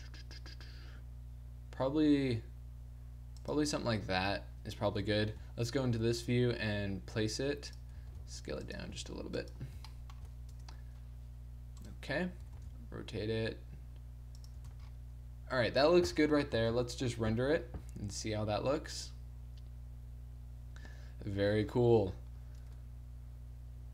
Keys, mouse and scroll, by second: 4.0-5.0 middle drag, 5.0 KP_3, 5.4 z, 5.7 middle click, 6.0 r, 8.0-10.5 typing, 12.1 click, 12.4 r, 14.7 a, 16.7 shift+z.